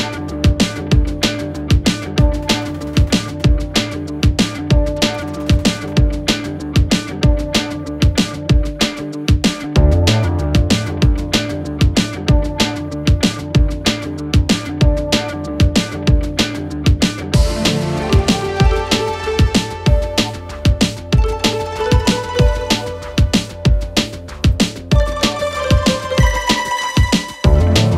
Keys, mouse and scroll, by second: 4.5 alt+scroll up 1, 4.9 space, 5.0-5.4 click, 5.2 space, 5.9-7.8 alt+drag, 10.8-11.7 click, 11.9 BackSpace, 14.2 ctrl+shift+., 16.3 alt+Down, 18.9 ctrl+shift+,, 20.9-23.6 drag, 23.8 alt+scroll down 1, 24.3-25.6 drag, 25.6-25.9 alt+scroll down 1, 27.6 alt+scroll down 1.